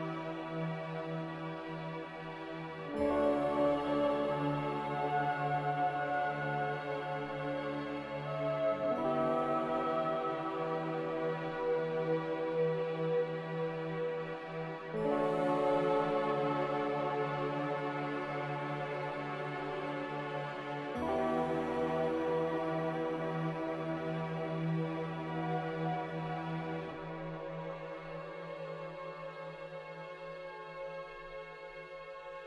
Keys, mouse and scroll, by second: 7.0 3, 7.4 Return, 9.7 2, 10.0 Return, 12.5-16.0 typing, 17.6 m, 20.2 z, 21.0 a, 24.6 g, 25.7 Escape, 26.6 z, 30.9 b, 32.3 Delete.